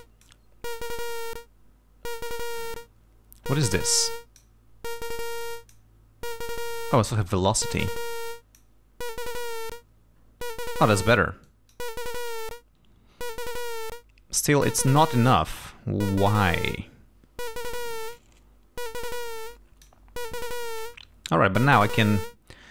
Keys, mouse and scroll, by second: 0.0 click, 4.0 click, 5.5 click, 6.4 click, 8.4 click, 11.5 click, 19.2 click.